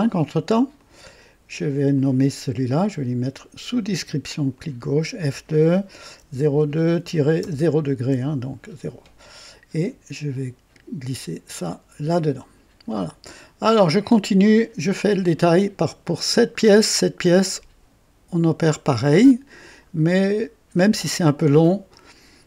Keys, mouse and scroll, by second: 0.7 click, 1.9 click, 4.5 click, 5.2 F2, 6.1 KP_0, 6.6 KP_2, 6.8 KP_Subtract, 7.3 KP_0, 8.0 KP_Enter, 10.3-11.7 drag, 12.9-13.7 drag, 19.8-20.2 scroll up 1, 20.5 scroll down 1, 21.1-21.7 right drag.